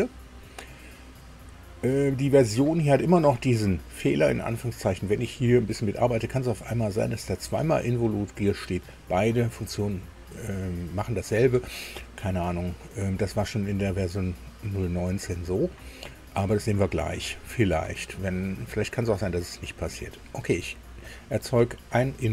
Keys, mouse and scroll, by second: 21.1 click.